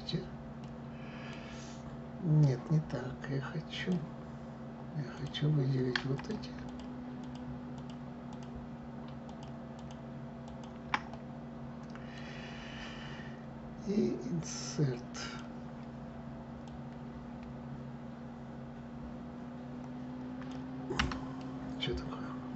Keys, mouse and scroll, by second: 4.8 click, 5.8 click, 6.3 shift+click, 6.9 shift+click, 7.4 shift+click, 8.0 shift+click, 8.9 shift+click, 9.4 shift+click, 10.1 shift+click, 10.8-13.8 middle drag, 14.9 click, 16.3 click, 20.6 Escape, 21.0-22.5 middle drag.